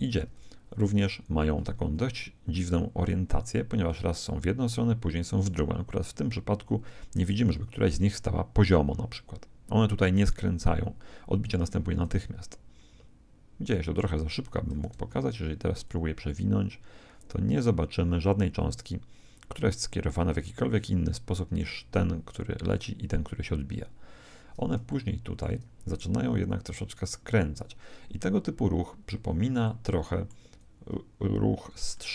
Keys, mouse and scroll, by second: 0.2 KP_1, 1.3-3.7 middle drag, 11.9 alt+a, 14.7 alt+a, 15.8 click, 24.9-26.6 middle drag, 28.3-28.8 scroll down 1, 28.8-32.1 middle drag.